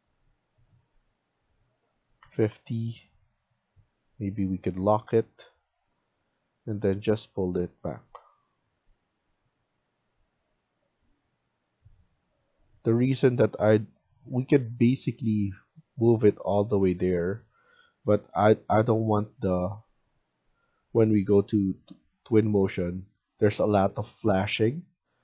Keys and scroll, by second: 1.8-2.6 typing, 6.3 Escape, 7.7 Escape, 12.7 Escape, 21.6 Escape.